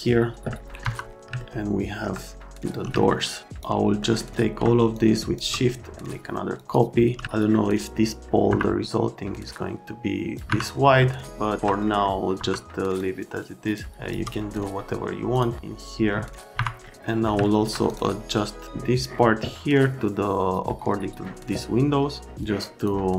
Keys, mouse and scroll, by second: 0.7 middle click, 1.4 alt+middle click, 3.0 alt+middle click, 3.4 click, 4.0 middle click, 4.9 ctrl+click, 6.6 click, 7.2 alt+right click, 8.5 F3, 9.3 middle click, 9.4 click, 10.5 F3, 11.0 alt+middle click, 11.8 middle click, 12.4 F3, 13.0 click, 13.9 shift+click, 15.3 click, 16.5 F3, 17.1 right click, 17.4 alt+right click, 17.9 middle click, 22.4 middle click.